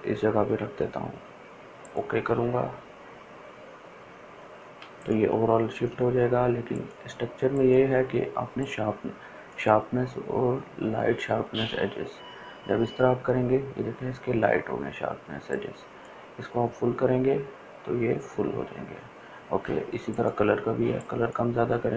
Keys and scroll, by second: 4.8 ctrl+space, 5.3 ctrl+space.